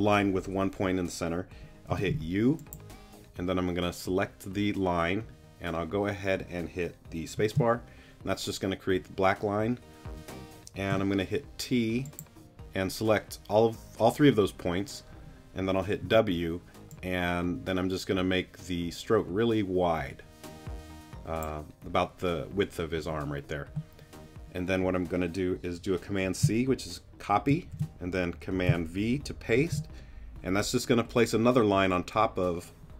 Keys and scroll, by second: 1.9 u, 7.3 space, 10.9 t, 16.0 w, 27.5 super+c, 29.6 super+v.